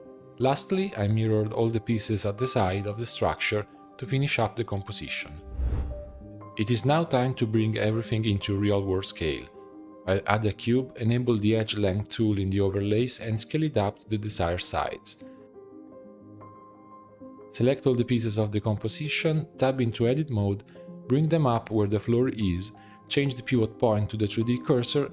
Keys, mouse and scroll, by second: 0.4-1.5 drag, 2.0-2.4 drag, 2.4-3.3 middle drag, 3.3-4.1 scroll up 1, 4.1-5.3 drag, 6.0 shift+middle click, 6.8 click, 7.1 scroll down 1, 7.4 shift+a, 8.4 Tab, 8.7 s, 9.6 g, 10.5 click, 11.6-12.7 drag, 12.7 shift+middle click, 13.2 3, 13.4 click, 14.0 click, 14.3-14.7 scroll down 4, 14.7 shift+middle click, 15.1 g, 16.0 shift+middle click, 16.3 g, 17.6-19.3 ctrl+drag, 19.6-20.3 scroll up 3, 20.3 Tab, 20.5 a, 21.3 g, 23.5-24.2 scroll down 1, 24.2 shift+middle click, 24.6 s.